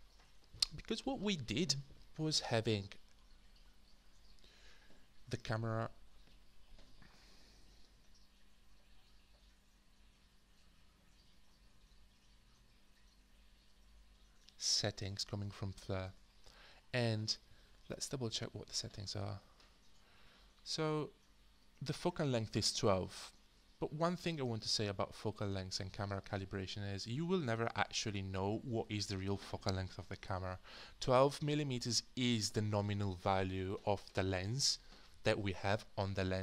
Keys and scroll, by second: 5.6 4.